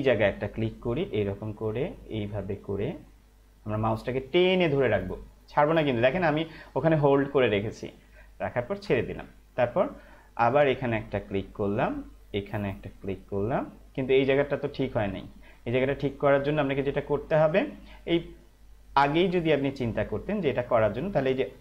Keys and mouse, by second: 1.5 click, 11.5 click, 19.3 ctrl+z.